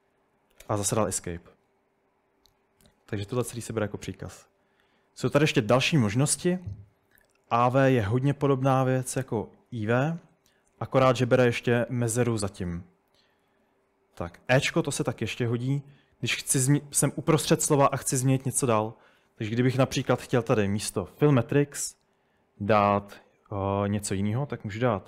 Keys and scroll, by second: 0.2-1.1 typing, 13.2-13.6 typing, 15.2-17.1 typing, 18.2-19.0 typing, 20.6-21.2 typing.